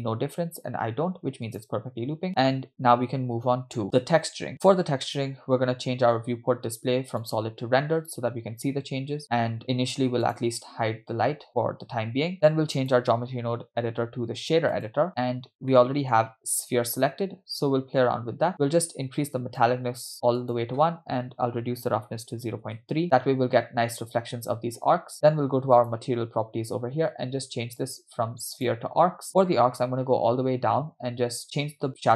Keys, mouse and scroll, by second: 1.6 click, 7.6 click, 10.3 click, 11.5 click, 12.8-15.0 drag, 15.3-15.7 scroll down 3, 15.7 middle click, 17.5 scroll up 4, 18.5-19.6 drag, 20.4-22.7 drag, 25.8 click, 26.9-27.6 scroll up 6, 28.6 click, 29.5-30.9 scroll down 6, 30.9-32.1 scroll down 2.